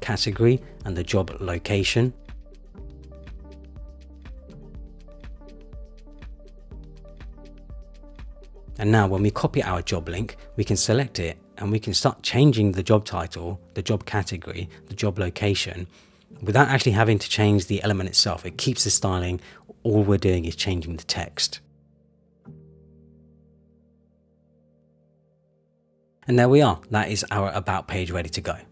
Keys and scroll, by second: 6.4 Return, 11.9 super+c, 12.2 super+v, 22.5 super+=.